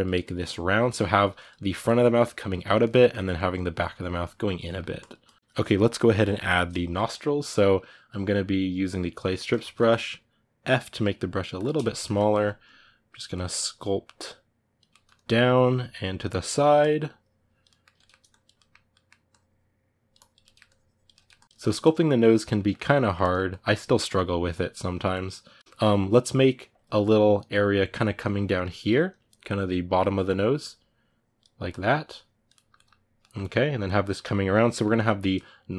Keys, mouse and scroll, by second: 0.0 click, 0.6 middle click, 1.1 click, 1.3 middle click, 1.6 click, 2.4 ctrl+middle click, 3.1-4.4 ctrl+drag, 4.4 middle click, 4.7 ctrl+click, 5.3-10.6 ctrl+middle drag, 10.6 f, 11.6 shift+middle click, 12.4 click, 13.1 ctrl+middle click, 13.3-14.7 drag, 14.7 ctrl+middle click, 14.9-16.2 drag, 16.2 ctrl+middle click, 16.5 click, 17.4 middle click, 18.0 click, 18.3 middle click, 19.0-20.2 drag, 20.2 ctrl+middle click, 20.4 click, 20.9 ctrl+middle click, 21.1 click, 21.4 shift+middle click, 21.6 click, 22.3 ctrl+middle click, 23.2-25.6 drag, 25.6-27.3 middle drag, 27.3-32.3 drag, 32.3 ctrl+middle click, 33.2-34.5 drag, 34.5-35.7 middle drag.